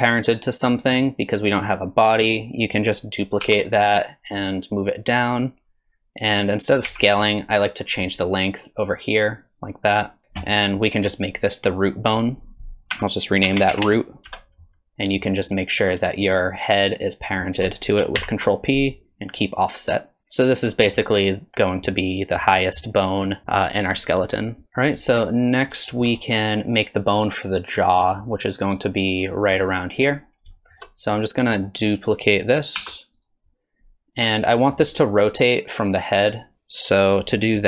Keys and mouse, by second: 3.4 shift+d, 4.5 click, 6.4 middle click, 6.9 n, 8.2-10.2 shift+drag, 10.9 middle click, 12.9 F2, 13.7 o, 15.4 click, 17.3 shift+click, 18.2 ctrl+p, 24.6 KP_3, 25.9 shift+click, 30.6 shift+middle click, 31.2 click, 32.8 shift+d.